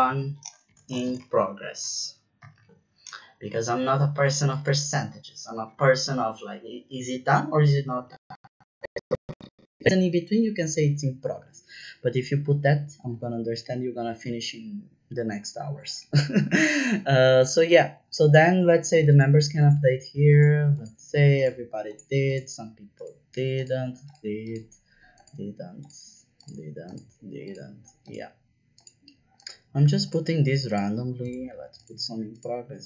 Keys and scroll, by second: 0.0-3.0 typing.